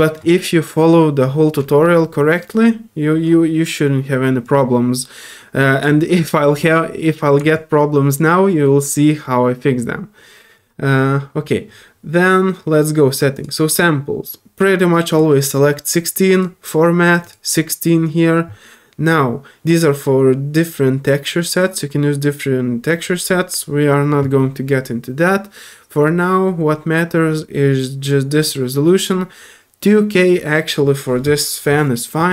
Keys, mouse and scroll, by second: 0.0-0.1 typing, 4.4-5.8 drag, 6.6 middle click, 7.5-10.5 alt+drag, 12.2 scroll down 1, 12.6 scroll up 1, 13.3 click, 15.1 click, 16.3 click, 17.2 click, 23.0 middle click, 23.0 scroll down 1.